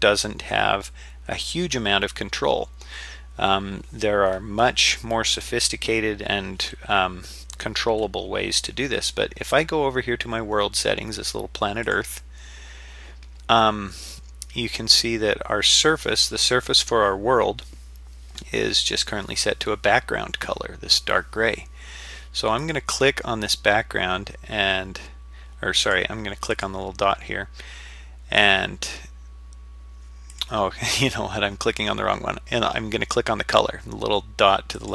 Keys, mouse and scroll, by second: 11.8 click, 22.6-25.7 drag, 25.8 click, 26.5-30.4 drag, 34.8-34.9 drag.